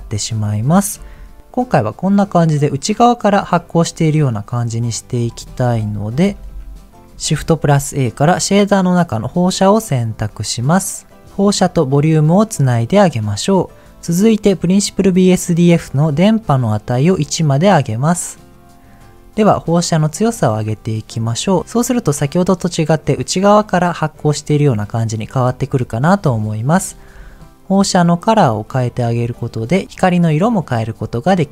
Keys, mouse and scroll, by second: 6.0 ctrl+click, 6.2 ctrl+z, 6.5 ctrl+z, 7.3 shift+a, 11.2-12.7 drag, 16.3-17.5 drag, 20.0-21.5 drag, 23.4-25.7 drag, 26.8 scroll up 1, 27.1 middle click, 28.2 click.